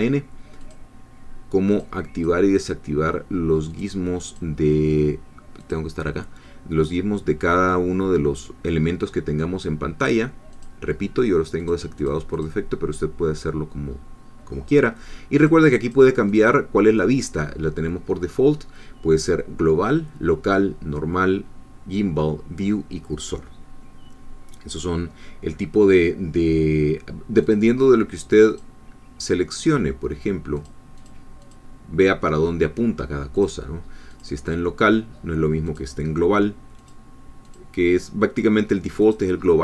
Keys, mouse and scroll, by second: 0.6 click, 1.8 click, 2.6 click, 3.8 click, 5.6 click, 10.5 click, 11.6 click, 12.0-12.6 drag, 15.4 click, 15.9 click, 16.3 click, 27.4 click, 28.5 click, 30.6 click, 31.0 click, 31.4 click, 33.4 click, 34.1 click, 35.7 click, 36.8 click, 37.5 click.